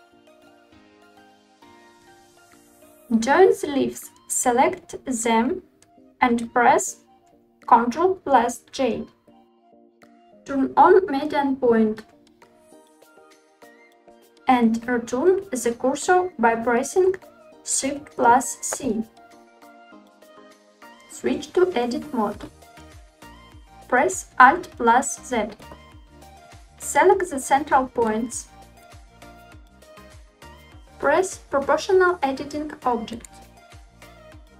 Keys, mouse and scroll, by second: 0.0-1.8 typing, 0.0 click, 0.1 middle click, 0.8 middle click, 0.8 click, 1.4 click, 1.5 middle click, 3.0 click, 3.5-3.9 scroll down 3, 3.9 scroll up 1, 4.1-4.6 scroll down 2, 5.1 shift+click, 6.9 ctrl+j, 8.5-9.4 middle drag, 9.7-12.7 drag, 18.2 shift+c, 22.3 Tab, 23.4 alt+z, 26.6-27.0 middle drag, 28.1 click, 29.9-30.4 middle drag, 33.7 click, 34.2 shift+middle click.